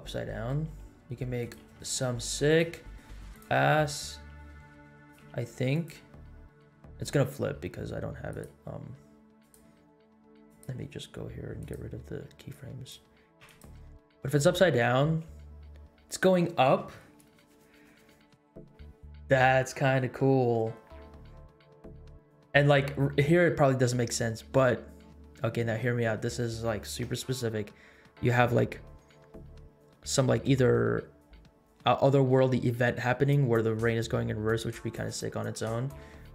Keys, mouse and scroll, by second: 0.0-0.4 middle drag, 0.7 r, 1.6 r, 2.7 g, 3.6 middle click, 4.2 r, 5.2 g, 8.3-8.6 drag, 9.3 click, 10.4-11.7 drag, 12.1-12.5 scroll down 1, 12.5 click, 13.3 x, 14.8 scroll up 1, 15.2 space, 21.1 scroll down 1, 22.6 space.